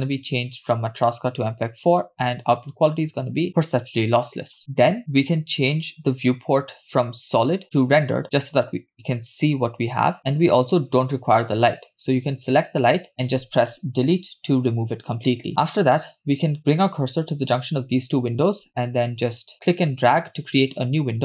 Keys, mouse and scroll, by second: 0.0-1.1 scroll down 2, 1.1-2.4 drag, 3.2-3.8 drag, 8.1 click, 12.3 click, 14.1 Delete, 19.7-21.2 drag.